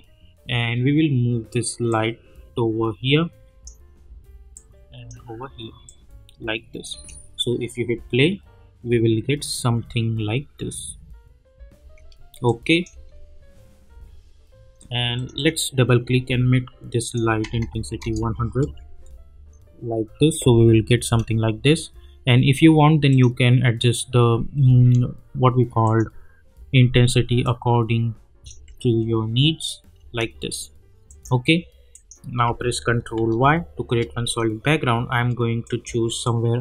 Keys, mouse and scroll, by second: 1.9-6.9 drag, 6.9 space, 11.7 space, 12.4 click, 12.9 space, 15.1 click, 18.0 Return, 18.6 space, 21.0 space, 23.1 click, 25.8 click, 28.5 space, 31.1 click, 33.2 ctrl+y, 34.2 click.